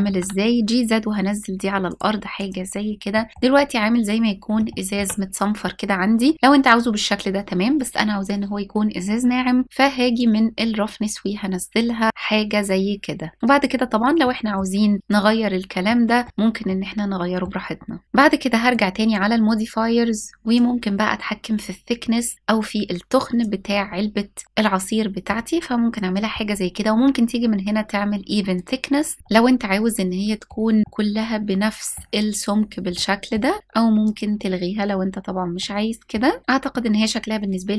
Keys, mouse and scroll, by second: 1.5 click, 1.9 s, 2.0 click, 2.8-3.2 middle drag, 4.3-4.6 shift+middle drag, 5.4 scroll up 1, 6.3 click, 9.8-13.4 drag, 13.8-14.2 middle drag, 15.5-15.9 shift+middle drag, 16.3-17.1 middle drag, 18.0 scroll down 2, 18.3-23.0 drag, 23.3-23.6 scroll up 1, 24.0-24.9 middle drag, 28.2 click, 29.2-30.1 middle drag, 30.8-31.6 middle drag, 32.3 scroll down 1, 32.6 middle click, 33.7 click, 35.2-35.8 middle drag, 36.4-36.9 scroll up 1.